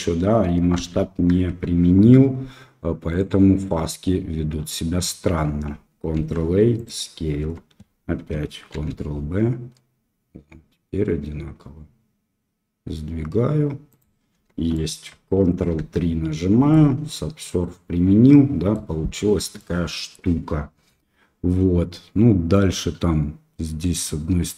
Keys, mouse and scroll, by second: 0.7 ctrl+z, 1.4 Tab, 6.1 ctrl+a, 7.4 Tab, 8.7 ctrl+b, 14.3 Tab, 14.7 middle click, 15.8 ctrl+3, 16.6-18.7 middle drag, 19.5 middle click.